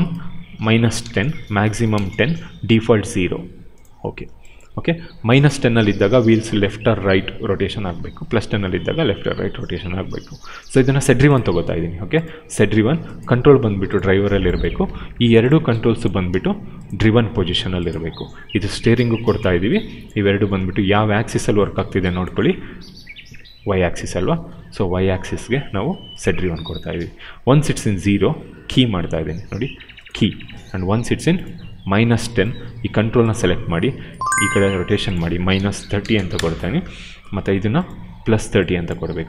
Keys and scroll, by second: 0.4 -, 0.9 0, 1.3 Tab, 1.8 1, 14.8 q, 20.4 e, 21.4 e, 24.0 ctrl+z, 33.4 e, 35.2-36.4 typing.